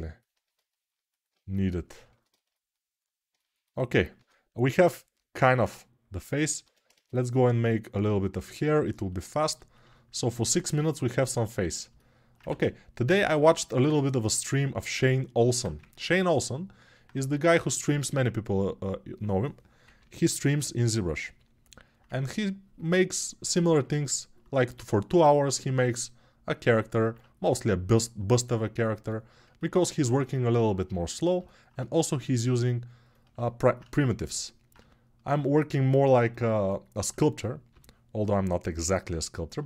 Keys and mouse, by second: 5.4 ctrl+s, 6.4 ctrl+Tab, 6.7 shift+a, 10.3 Tab, 12.3 ctrl+z, 15.7 ctrl+Tab, 37.5 g.